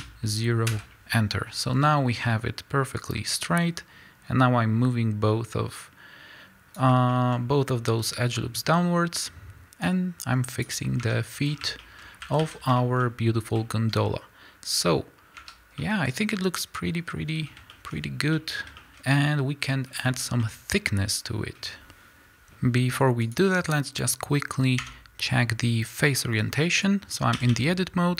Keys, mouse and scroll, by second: 1.7 KP_Enter, 3.2-7.1 drag, 7.1-10.1 shift+middle drag, 7.4-8.7 scroll up 2, 8.7 z, 10.1-11.8 drag, 11.2 Tab, 11.4 scroll down 1, 11.8-22.3 shift+middle drag, 12.0 scroll up 1, 12.4 a, 14.2 ctrl+Tab, 15.5 Tab, 18.0-18.3 scroll up 2, 20.3 scroll up 2.